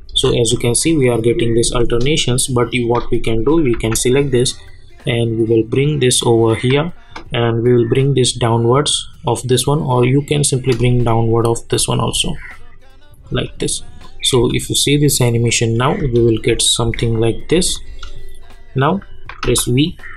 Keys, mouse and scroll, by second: 2.7 shift+click, 3.7 v, 4.6-10.8 drag, 10.8 space, 14.0 click, 14.3 space, 16.8 -, 17.3 click, 17.5 space, 18.4 click, 19.4 v, 19.8 click.